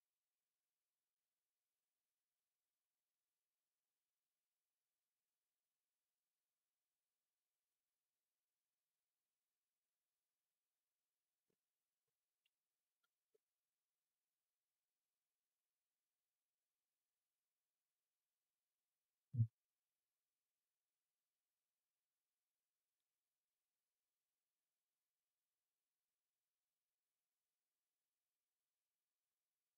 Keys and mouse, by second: 6.6 z, 8.8 middle click, 9.2 z, 22.5 middle click, 24.6 z, 29.1 ctrl+s.